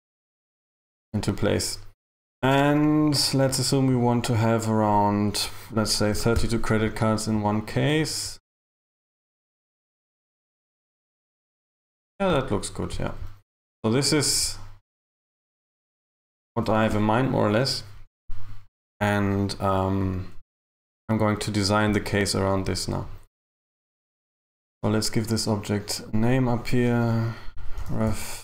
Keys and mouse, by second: 2.2 KP_3, 5.2 click, 23.8 a, 24.0 a, 24.4 right click, 26.1 click, 26.4 click.